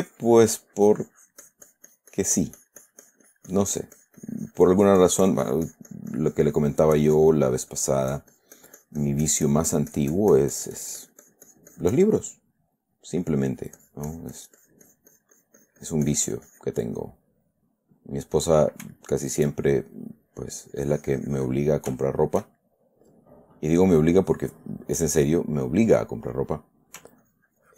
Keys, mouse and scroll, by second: 0.1-12.6 drag, 12.6 middle click, 13.1 middle click, 13.6 middle click, 14.1-17.2 drag, 17.3 middle click, 19.3 shift+middle click, 20.3 click, 21.0-22.2 drag, 22.3 shift+middle click, 23.0-24.2 shift+middle drag, 27.6-27.7 ctrl+drag.